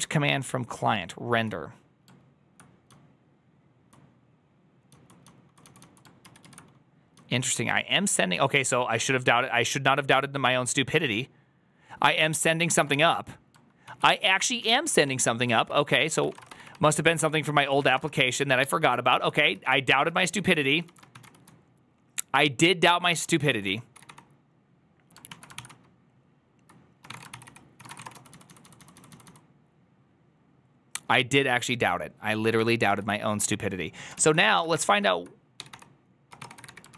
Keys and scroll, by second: 2.7-5.8 typing, 6.1 ctrl+u, 6.3 ctrl+u, 7.0 j, 7.7 j, 8.0 j, 13.7 ctrl+a, 13.7 ctrl+w, 13.7 1, 14.5 k, 14.8 ctrl+w, 14.9 ctrl+o, 15.3 ctrl+n, 15.6 ctrl+s, 15.8-18.5 typing, 17.0 ctrl+d, 19.0 ctrl+u, 19.4 ctrl+u, 20.1 ctrl+u, 20.1-29.1 typing, 25.2 ctrl+o, 32.8 ctrl+u, 34.0 ctrl+u, 34.6 ctrl+d, 35.2-36.9 typing.